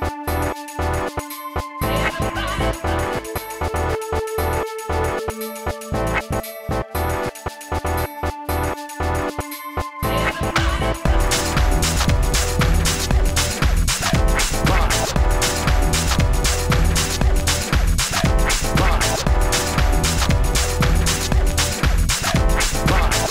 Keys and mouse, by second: 0.1 g, 0.3 Tab, 0.8 Tab, 1.0 ctrl+s, 2.2 a, 2.9 g, 3.9 Tab, 4.8 g, 5.7 click, 5.9 g, 6.8 Tab, 7.2 ctrl+s, 7.3 a, 9.7 KP_1, 10.5 ctrl+s, 14.5-18.7 drag, 18.7 f, 19.3 BackSpace, 20.3 BackSpace, 20.8 click, 22.8-23.3 drag.